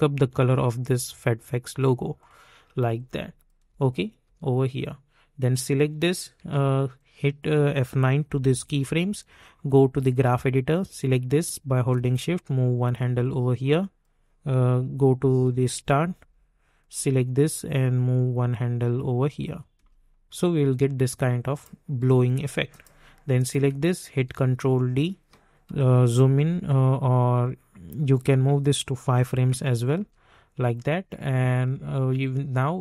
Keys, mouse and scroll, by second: 3.6 space, 4.6 -, 5.5 click, 6.9-8.2 drag, 8.2 F9, 9.9-13.6 drag, 13.6 click, 15.8-16.2 typing, 16.7-19.7 drag, 19.7 space, 21.5 click, 22.0 -, 22.7 click, 24.1 ctrl+d, 25.6 =, 26.1-29.0 drag, 29.0 [, 29.5 space.